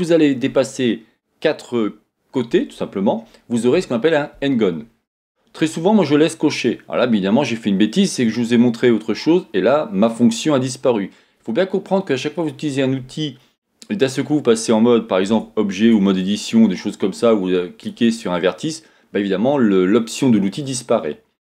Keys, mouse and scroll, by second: 15.3 Tab, 17.8-21.4 drag.